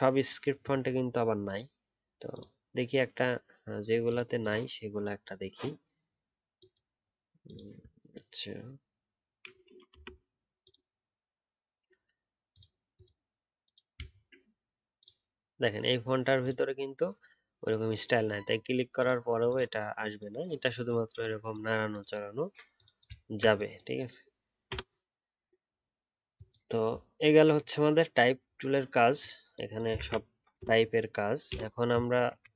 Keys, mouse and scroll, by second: 7.7 alt+scroll down 1, 14.0-17.1 alt+scroll up 1, 23.2-23.9 alt+scroll down 1, 29.9 ctrl+a.